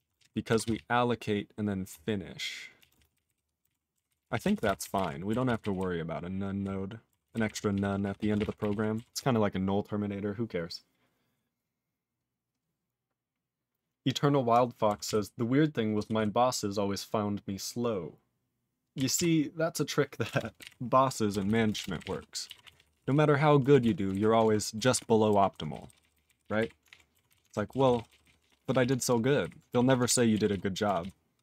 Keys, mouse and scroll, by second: 0.1 ctrl+space, 0.1 ctrl+e, 0.2 ctrl+g, 0.6 ctrl+s, 0.8-1.8 ctrl+p, 2.8 ctrl+a, 2.9 ctrl+space, 2.9 ctrl+e, 3.1 ctrl+n, 3.1 ctrl+e, 3.2 ctrl+n, 3.6 ctrl+g, 3.6 ctrl+e, 4.1 ctrl+s, 4.2 ctrl+p, 4.3 ctrl+p, 4.4 ctrl+a, 4.6 ctrl+space, 4.6 ctrl+e, 4.7 ctrl+n, 4.8 ctrl+n, 4.9 ctrl+g, 5.0 ctrl+e, 5.4 ctrl+s, 5.6 ctrl+n, 5.7-6.6 ctrl+n, 7.2 ctrl+s, 7.3 ctrl+n, 7.4 ctrl+n, 7.7 ctrl+p, 8.0 ctrl+p, 8.1 ctrl+a, 8.3 ctrl+space, 8.3 ctrl+e, 8.4 ctrl+n, 8.6 ctrl+g, 8.7 ctrl+e, 9.1 ctrl+s, 15.0 ctrl+s, 16.2 ctrl+s, 19.1 ctrl+s, 20.2 ctrl+space, 20.3 ctrl+a, 20.6 ctrl+g, 20.6 ctrl+e, 21.5 ctrl+s, 21.7 ctrl+space, 21.7 ctrl+a, 21.8 ctrl+p, 21.9 ctrl+g, 22.0 ctrl+e, 22.1 ctrl+n, 22.6 ctrl+s, 22.7 ctrl+p, 22.9 ctrl+p, 23.0 ctrl+p, 23.8 ctrl+s, 24.1 ctrl+alt+b, 24.4 ctrl+alt+f, 24.9 ctrl+s, 25.5 ctrl+s, 25.7 ctrl+n, 25.8 ctrl+n, 26.0 ctrl+n, 26.1 ctrl+n, 26.2 ctrl+n, 26.4 ctrl+e, 26.6 ctrl+b, 26.8 ctrl+alt+f, 27.3 ctrl+s, 27.4 ctrl+alt+b, 27.8 ctrl+s, 27.9 ctrl+n, 28.1 ctrl+n, 28.2 ctrl+n, 28.4 ctrl+p, 28.5 ctrl+p, 28.7 ctrl+p, 29.0 ctrl+alt+f, 29.4 ctrl+alt+b, 29.8 ctrl+s, 30.0 ctrl+alt+f, 30.5 ctrl+s, 31.0 ctrl+s.